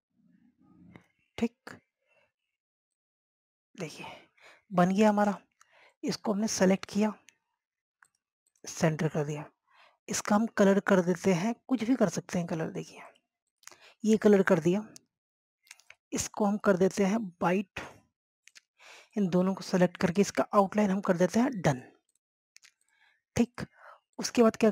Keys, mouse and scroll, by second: 0.1-2.3 drag, 2.3 scroll down 1, 3.0 scroll up 1, 3.8 click, 5.1 scroll down 1, 6.2 scroll down 1, 6.4-12.2 drag, 15.9 scroll down 1, 16.6 scroll up 1, 17.0 click, 21.4-22.8 scroll up 1, 22.8 right click, 23.2 click, 23.5 scroll down 1, 23.9 click, 24.3 scroll up 1, 24.5-24.7 drag.